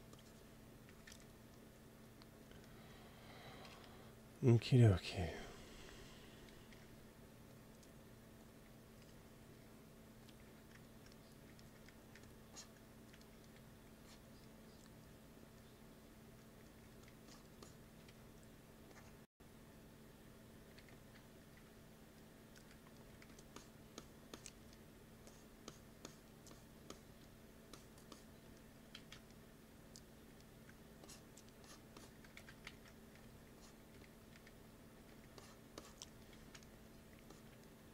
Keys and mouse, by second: 0.8 g, 1.1 f, 1.4 click, 3.5 KP_1, 5.1 ctrl+s, 6.6 t, 7.4-9.2 drag, 9.3-11.2 drag, 10.4 t, 12.0 f, 12.4-15.8 drag, 16.8 f, 17.2 click, 18.0 t, 20.7-22.1 drag, 21.4 t, 22.5 f, 23.1 f, 23.5 click, 25.9-29.8 drag, 28.9 ctrl+z, 30.9-32.2 drag, 32.3-34.9 typing, 32.6 ctrl+z, 36.2 click, 36.3 ctrl+z, 36.6-37.9 drag.